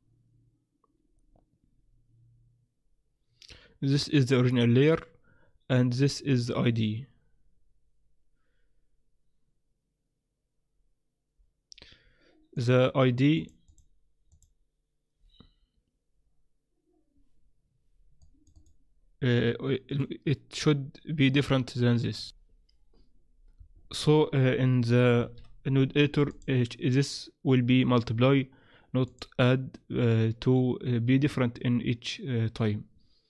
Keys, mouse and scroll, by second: 12.5 click, 13.7 click, 24.0 click, 25.2 shift+F3, 26.3 click.